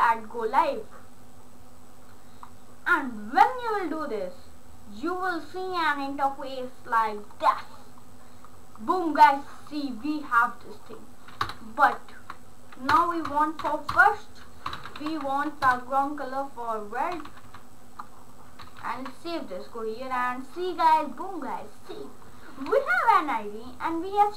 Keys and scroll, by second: 11.5 Return, 11.8 shift+3, 12.9 Return, 13.6-15.7 typing, 13.9 Return, 16.9-18.0 typing, 18.8 ctrl+s.